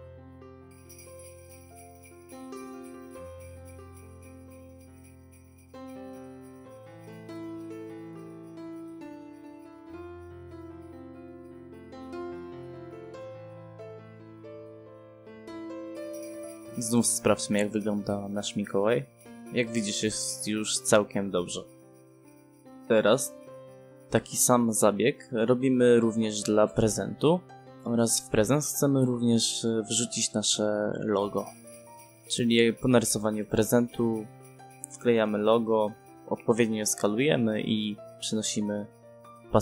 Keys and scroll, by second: 9.7 space, 11.6 space, 18.9 ctrl+p, 23.5 Escape, 25.6 space, 26.5 1, 26.8 space, 28.8 f, 29.3 space, 35.1 s, 35.3 c, 35.5 space, 36.7 1, 37.3 ., 37.8 5, 37.9 space.